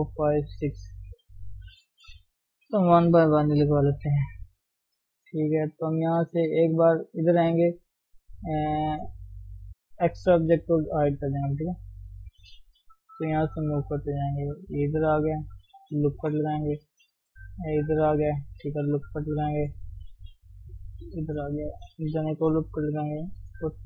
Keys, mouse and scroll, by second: 2.1 ctrl+r, 3.8 ctrl+KP_1, 10.5 click, 10.9-12.0 scroll up 4, 11.3 shift+middle click, 12.0 scroll down 2, 12.0 shift+middle click, 12.5-13.2 scroll down 1, 13.2 g, 16.0 ctrl+r, 17.2 g, 19.3 ctrl+r, 20.5 g, 22.3 ctrl+r, 23.4 g.